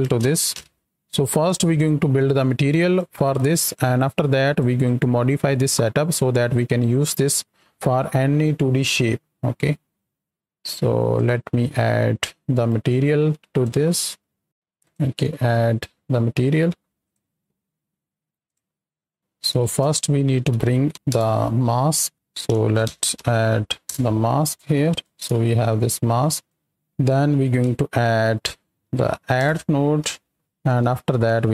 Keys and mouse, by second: 1.4-2.9 drag, 3.6-4.6 drag, 5.0 middle click, 6.1 middle click, 9.6-10.2 middle drag, 12.5 right click, 13.4 click, 15.6-17.1 drag, 18.4 click, 19.5 shift+a, 20.9 t, 22.1-23.9 drag, 24.9 ctrl+shift+click, 25.5 click, 26.4 click, 28.9 d, 31.0 shift+d.